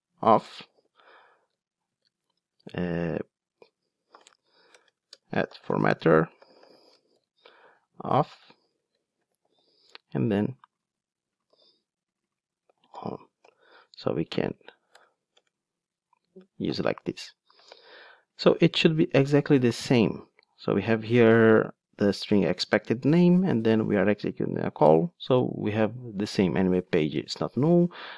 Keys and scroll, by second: 10.8 super+c, 11.5 super+v, 13.4 alt+super+l.